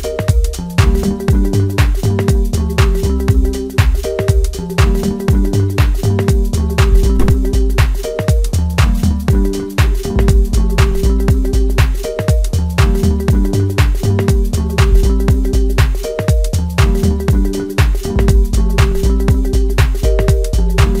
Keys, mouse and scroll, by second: 0.3-0.6 scroll down 2, 0.6-1.5 middle drag, 1.5 scroll up 1, 2.3-2.7 scroll up 1, 2.7 KP_1, 3.8 KP_0, 5.1-5.4 scroll down 2, 5.7 drag, 6.6-7.3 drag, 7.3-7.7 scroll up 5, 8.3 click, 13.4-14.3 scroll up 3, 14.9-16.3 middle drag, 16.3 KP_1, 16.8-17.6 scroll up 2, 17.6 click, 18.9 KP_Divide, 19.7-21.0 middle drag.